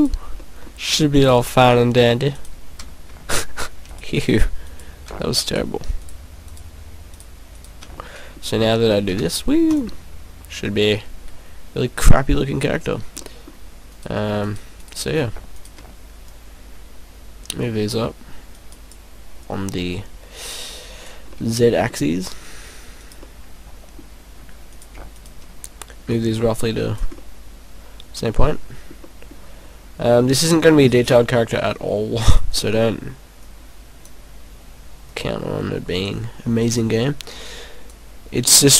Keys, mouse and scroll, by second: 0.4 middle click, 1.1 right click, 2.4 right click, 3.8 shift+right click, 6.0 shift+right click, 6.6 shift+right click, 7.1 shift+right click, 7.5 shift+right click, 7.9 middle click, 9.1 e, 9.7 click, 9.9 middle click, 13.2 middle click, 13.9 right click, 14.4 shift+right click, 14.7 right click, 15.7 shift+right click, 16.3 click, 19.5 click, 21.3 middle click, 23.0 right click, 23.2 middle click, 24.7 right click, 25.1 shift+right click, 26.1 click, 27.2 middle click, 29.1 middle click, 30.4 middle click, 30.8-31.3 scroll down 5, 31.7 middle click, 32.3 right click, 32.8 middle click, 33.8 click, 35.1 click, 36.6 right click, 37.5 click.